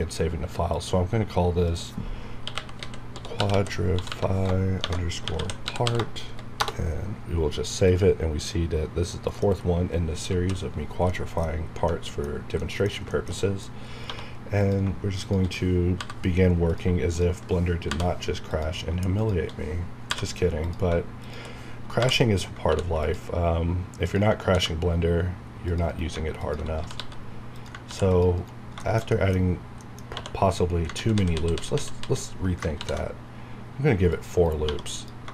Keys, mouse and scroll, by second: 0.7 click, 2.1-6.4 typing, 6.5 Return, 7.8 click, 9.1 middle click, 9.6-10.2 scroll up 1, 10.2 KP_1, 11.0 middle click, 11.5 scroll down 1, 11.8 middle click, 12.3 scroll up 1, 12.5 middle click, 13.8 scroll up 1, 14.0 1, 14.5 click, 15.2 shift+click, 15.9 j, 16.6 click, 17.0 shift+click, 17.8 j, 18.4 click, 20.0 j, 20.5 click, 22.6 ctrl+r, 24.4 ctrl+r, 24.7-25.6 scroll up 1, 25.6 click, 25.8 right click, 26.3 click, 26.7 typing, 27.5 click, 27.8 ctrl+r, 28.1 ctrl+click, 28.3 right click, 28.8 shift+middle click, 29.4-29.8 scroll up 1, 29.8 middle click, 30.1 2, 30.9 ctrl+z, 32.7 ctrl+r, 33.0 scroll up 1, 34.0 click, 34.3 right click, 34.6 1, 34.9 click.